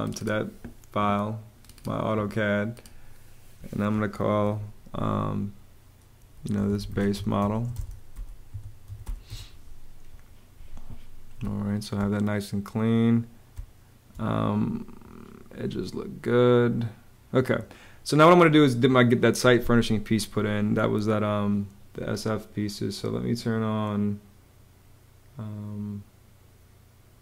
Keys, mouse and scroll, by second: 6.2-9.3 typing, 11.1 space, 13.3 space.